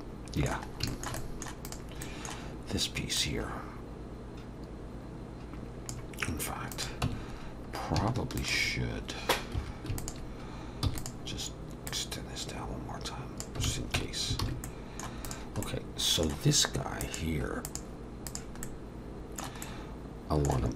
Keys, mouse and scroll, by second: 0.7 scroll up 2, 0.9 shift+middle click, 1.2 middle click, 1.7 click, 2.0 middle click, 3.2 click, 6.7 click, 7.1 Tab, 7.4-8.0 scroll up 1, 8.4 alt+shift+click, 9.6 2, 10.0 alt+shift+click, 10.9 e, 11.9 click, 13.7 alt+a, 14.0 Tab, 14.4 alt+a, 14.7 middle click, 15.3 click, 15.6 middle click, 17.0 click, 18.6 middle click, 20.1 middle click.